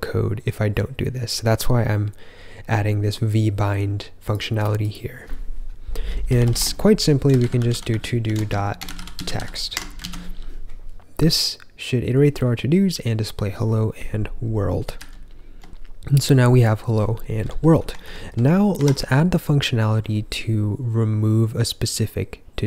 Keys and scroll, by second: 6.1-9.8 typing, 9.9 super+s, 14.9 ctrl+j, 18.0 ctrl+k, 18.2 ctrl+k, 18.7 Escape.